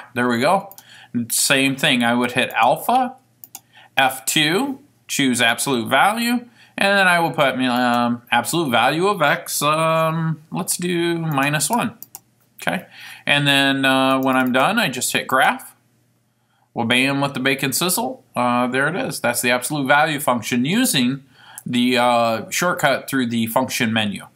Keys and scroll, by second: 5.7 Return, 11.5 -, 12.2 1, 14.2 Right, 14.4 Right, 14.6 Right, 15.3-16.1 typing, 21.4-22.7 typing.